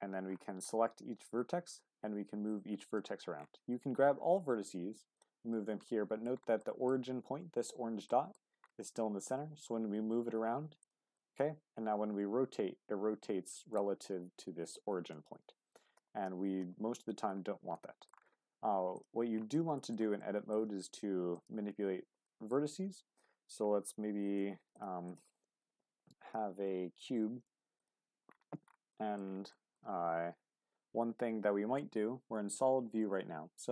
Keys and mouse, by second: 1.1 g, 3.7 a, 4.1 g, 4.3 x, 5.1 click, 5.5 Tab, 5.9-6.3 middle drag, 6.6-6.9 middle drag, 8.1 middle drag, 10.8 click, 11.2 middle click, 11.9 r, 16.0 ctrl+z, 17.7 click, 19.5 click, 20.2 click, 21.3 click, 21.7 Tab, 22.2 click, 22.9 ctrl+z, 24.4 Tab, 24.9 x, 25.7 shift+a, 28.9 middle click, 29.6 middle drag.